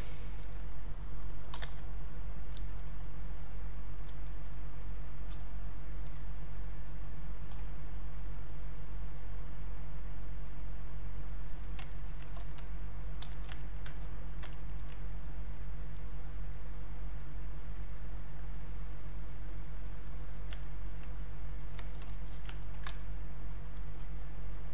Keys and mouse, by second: 0.1 ctrl+right click, 1.2-2.7 typing, 3.3 click, 4.9 click, 5.0 space, 5.5 click, 11.9 ctrl+right click, 12.3 click, 13.2 alt+click, 13.7 ctrl+right click, 14.0 ctrl+click, 14.5 ctrl+right click, 15.4 click, 20.6 ctrl+right click, 21.6 click, 22.3 alt+click, 22.6 ctrl+right click, 22.9 ctrl+space, 23.4 ctrl+click, 24.3 ctrl+click.